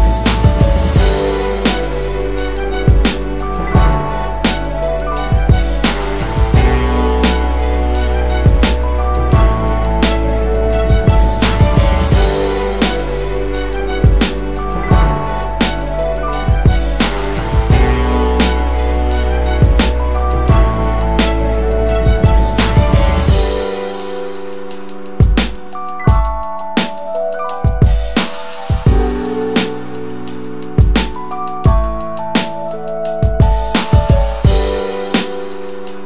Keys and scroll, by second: 16.5 ctrl+a, 35.0 w.